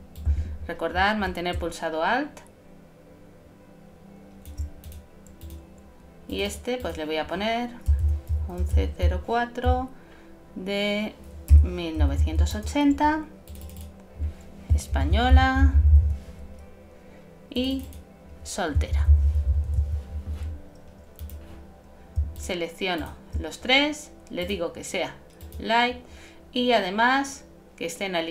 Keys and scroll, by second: 0.3 alt+shift+super+z, 14.9 shift+e, 18.7-19.6 typing.